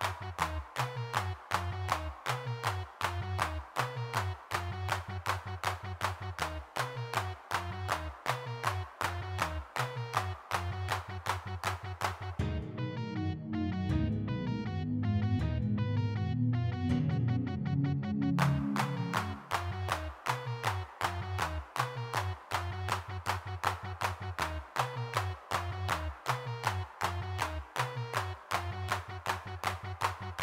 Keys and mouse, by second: 0.4 middle click, 1.6-3.4 middle drag, 3.8 g, 3.8 f, 4.4 click, 5.2 middle click, 5.4 click, 5.9 middle click, 6.1 click, 6.8 middle click, 7.3 click, 7.8-11.7 middle drag, 12.7 middle click, 13.7 middle click, 14.1 f, 14.7 middle click, 15.9 middle click, 16.4 ctrl+z, 16.7 3, 16.9 click, 21.1 middle click, 21.7-23.0 drag, 23.0 middle click, 23.9 middle click, 24.3-25.7 drag, 25.7-27.9 middle drag, 28.1 middle click, 28.4-30.4 middle drag.